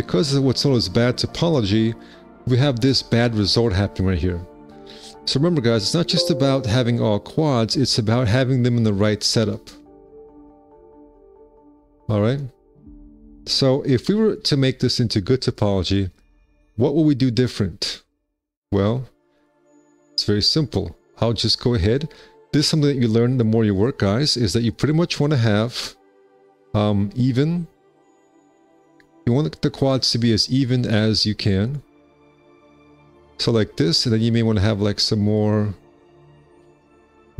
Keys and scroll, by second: 11.7 w, 18.7 1, 20.2 q, 21.2 alt+c, 34.9 alt+c.